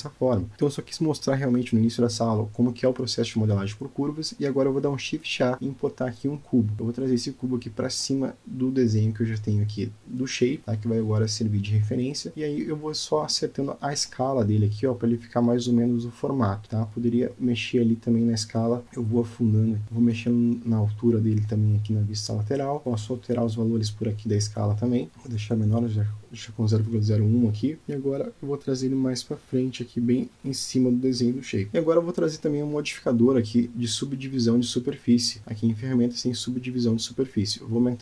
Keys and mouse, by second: 1.6 Delete, 3.0 click, 5.5 shift+a, 11.9 s, 16.5 s, 18.7-19.1 middle drag, 19.2 s, 23.3-26.2 drag, 26.7 click, 27.0-28.4 middle drag, 28.9 click, 30.6 g, 33.8 click, 34.6-36.5 drag.